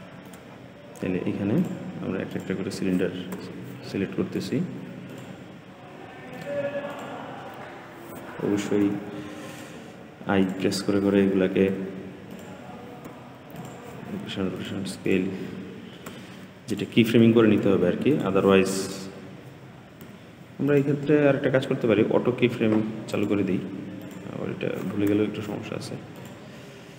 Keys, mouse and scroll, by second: 0.4-0.9 scroll up 5, 0.9-1.5 scroll down 2, 1.5 click, 2.2 click, 3.3 g, 4.9 click, 6.2 click, 6.8 click, 8.7 i, 10.3 click, 11.6 g, 12.9 i, 14.4 click, 14.9 click, 15.9 g, 17.4 i, 18.7 click, 20.0 g, 23.0 click, 23.9 click, 25.1 g.